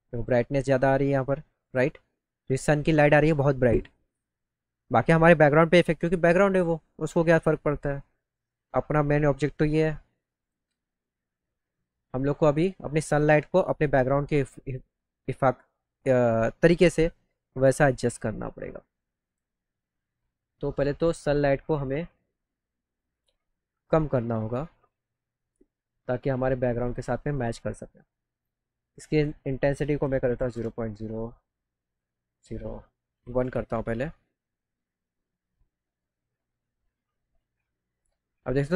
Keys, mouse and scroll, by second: 1.6 click, 10.4 click, 23.1 click, 26.4 click, 29.0 click, 30.4 KP_Decimal, 38.1 middle click, 38.6-38.7 scroll up 2.